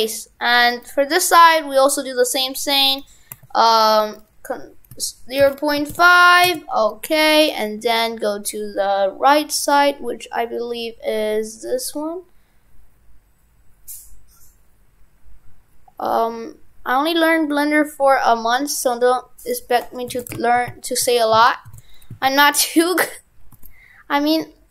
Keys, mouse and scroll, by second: 0.7 right click, 19.4 click, 20.2 shift+f.